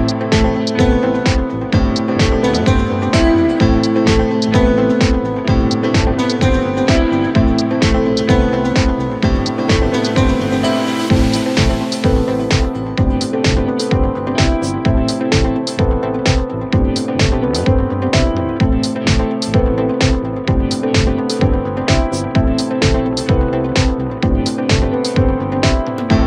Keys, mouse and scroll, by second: 2.5-5.7 drag, 5.8-8.9 drag, 11.2 middle click, 11.9-12.8 scroll up 1, 12.8 e, 15.1 KP_1, 15.9-17.0 scroll up 1, 17.0 Tab, 17.4-18.4 scroll down 6, 18.4-20.0 shift+middle drag, 20.0 ctrl+2, 20.8-21.6 scroll up 3, 21.6-22.5 shift+middle drag, 22.5-23.6 scroll up 2, 23.6-23.9 scroll up 1, 23.9 Tab, 24.7-25.3 scroll up 1.